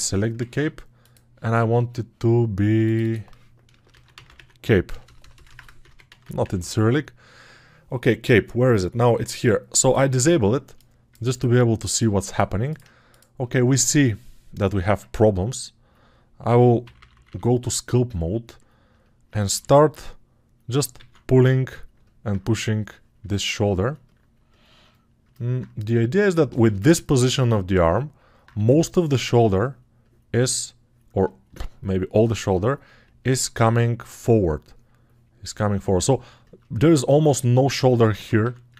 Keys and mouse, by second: 0.4 ctrl+Tab, 10.5-12.0 alt+right drag, 12.0 alt+click, 12.6-18.8 right drag, 14.9 ctrl+Tab.